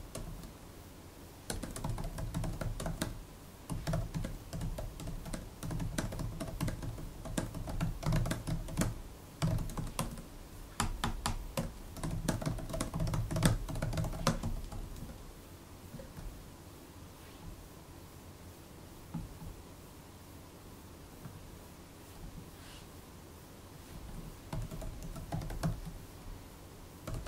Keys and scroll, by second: 0.0-15.8 typing, 24.0 super+Right, 24.1-27.2 typing.